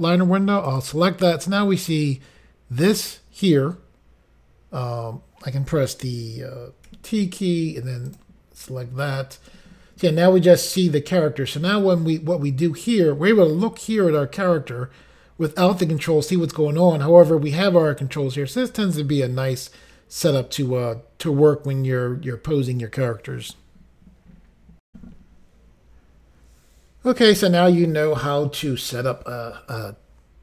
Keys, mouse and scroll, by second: 0.7 click, 0.8 click, 8.1 click, 8.1 t, 8.2 click, 9.5 t, 24.9 Pause.